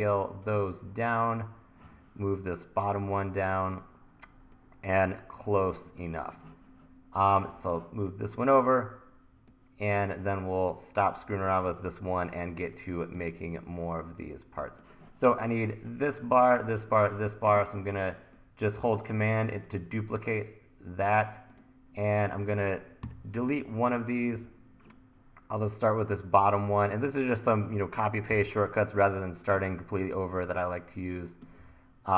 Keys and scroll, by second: 1.9 e, 5.9 1, 7.4 e, 12.5 super+z, 16.0 1, 23.1 Delete, 24.4 e, 27.6 1, 28.3 r, 31.6 e.